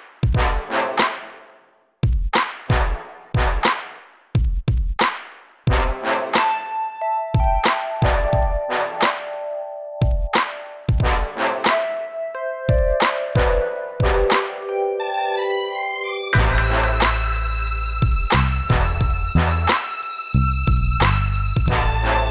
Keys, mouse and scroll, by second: 0.1 click, 0.8 middle click, 1.8 scroll up 2, 3.9 click, 4.5 scroll down 2, 5.4 scroll up 2, 5.5 right click, 5.6 right click, 6.3 click, 7.8 click, 8.5 click, 8.7 click, 9.2 right click, 9.3 double right click, 10.0 click, 12.1 scroll down 2, 14.0 click, 14.9 click, 15.1 click, 15.3 double click, 18.1 click, 22.2 scroll down 2.